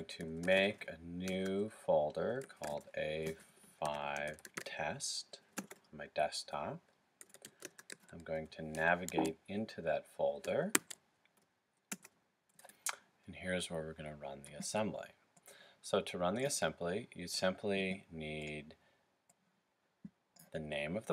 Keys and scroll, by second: 0.0-0.4 typing, 2.2-4.5 typing, 6.9-10.8 typing.